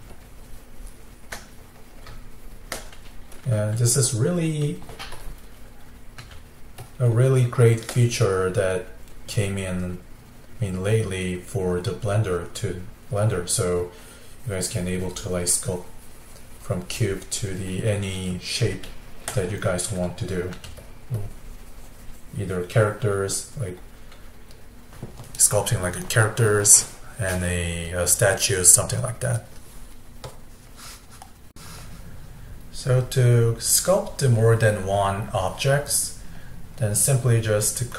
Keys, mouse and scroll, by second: 0.2-1.6 shift+drag, 1.6-5.2 middle drag, 5.2-6.3 drag, 6.3 f, 7.1-11.1 middle drag, 13.9-16.9 drag, 18.1-20.6 middle drag, 20.6 f, 21.2-23.4 drag, 23.4-27.6 middle drag.